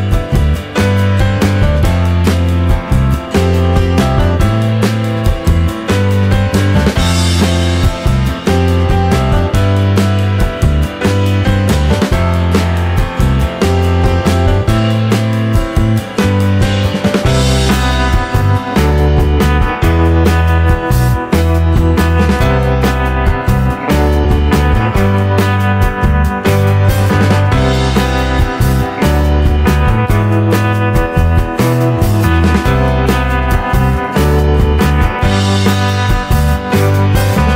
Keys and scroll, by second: 6.2 Delete, 6.7 space, 8.9 space.